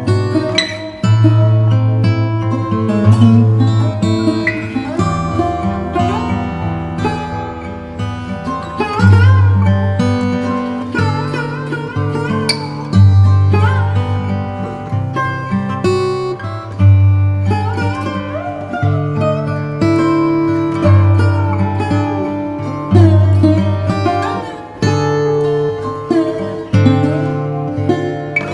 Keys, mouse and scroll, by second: 4.1 click, 12.8 click, 12.8 click, 15.4 click.